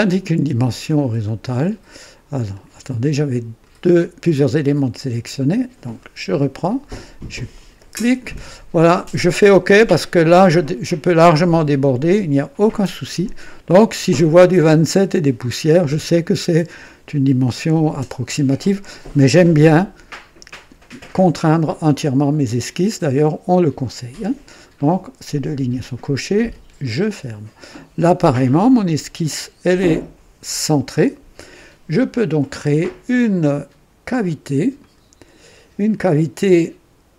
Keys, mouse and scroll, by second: 1.2 click, 2.4 click, 3.5 click, 5.9 click, 7.4 click, 10.2 click, 26.7 click, 34.7 click.